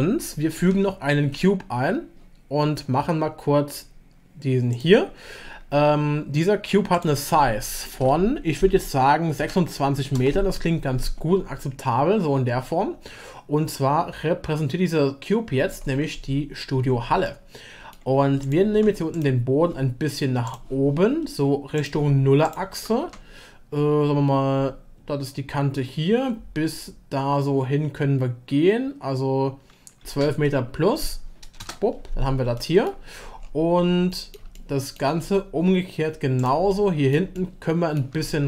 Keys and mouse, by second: 0.7 shift+a, 7.0-10.9 drag, 17.2-17.9 middle drag, 18.7 Tab, 20.4 Tab, 20.4 click, 22.7 g, 32.6 middle click, 34.1 middle click, 34.7 shift+middle click, 36.7-37.1 drag, 37.3 shift+middle drag, 37.6-37.9 shift+drag, 38.3 middle click.